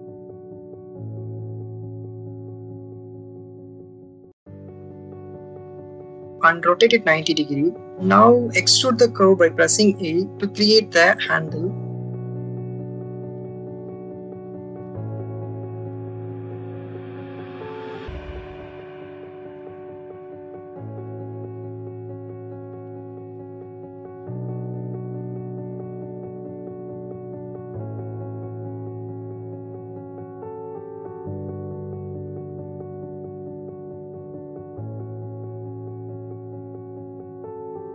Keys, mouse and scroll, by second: 0.3 click, 1.4 shift+middle click, 3.1 click, 4.3 click, 5.7 r, 7.5 9, 7.7 0, 8.1 click, 8.9 e, 10.2 click, 10.7 click, 11.2 r, 12.1 click, 12.5 click, 13.6-14.7 drag, 14.9 click, 15.5 click, 16.3 click, 17.5 click, 18.5 click, 19.1 click, 19.6-21.2 drag, 21.5 click, 21.9 click, 22.4-23.5 drag, 23.6 click, 24.1-25.6 drag, 26.8 click, 27.6 e, 28.5 click, 28.7 r, 29.5 click, 29.9 middle click, 31.3 click, 31.9 r, 34.3 shift+click, 35.3 r, 37.2 shift+click.